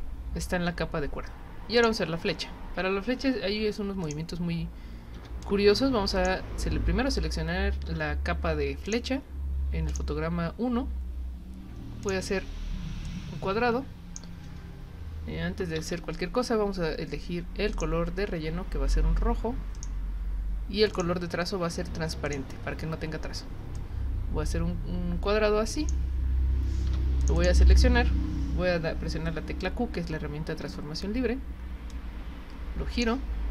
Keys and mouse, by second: 1.8 click, 4.0 click, 5.4 click, 8.8 click, 9.9 click, 12.0 click, 13.0-14.2 drag, 17.7 click, 19.7 click, 21.0 click, 22.3 click, 23.7-25.9 drag, 27.2 click, 27.4 click, 31.9-33.0 drag.